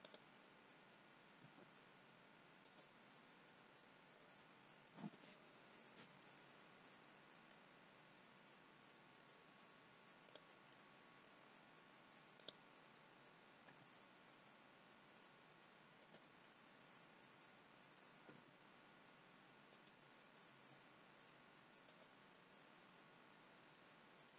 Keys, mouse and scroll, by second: 0.1 middle click, 0.1 click, 1.3 r, 3.7 middle click, 4.9 click, 5.4-6.3 scroll down 3, 6.3 middle click, 10.3 click, 10.7 middle click, 12.2 click, 13.6 g, 16.4 middle click, 18.3 g, 20.5 g, 22.3 middle click.